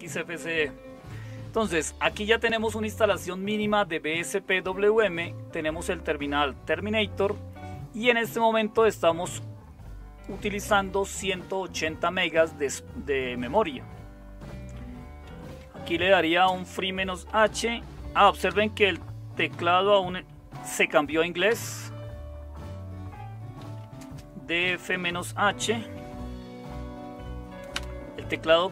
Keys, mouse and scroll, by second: 15.0-18.4 typing, 19.5 typing, 20.5-21.5 typing, 23.3-25.9 typing, 27.7 typing.